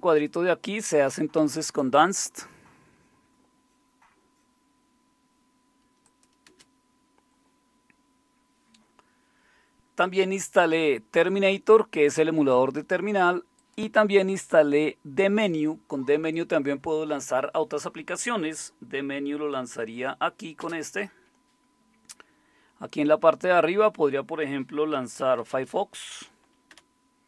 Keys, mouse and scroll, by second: 6.5-9.2 drag, 6.5 space, 11.2-20.6 drag, 20.6 super+space, 24.9-26.0 typing, 26.7 Return.